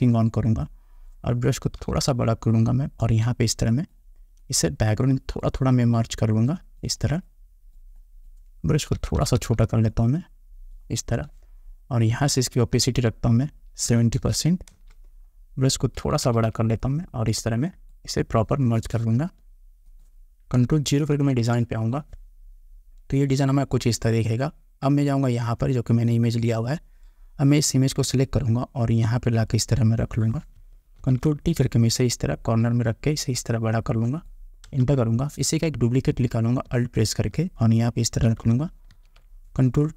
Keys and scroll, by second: 2.0 ], 9.1 [, 14.1 7, 14.4 0, 21.3 ctrl+0, 34.8 Return.